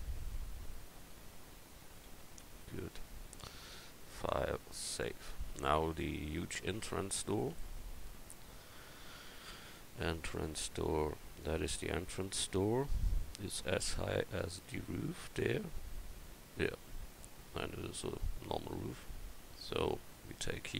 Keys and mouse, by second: 2.1 a, 5.5 Up, 6.3 KP_1.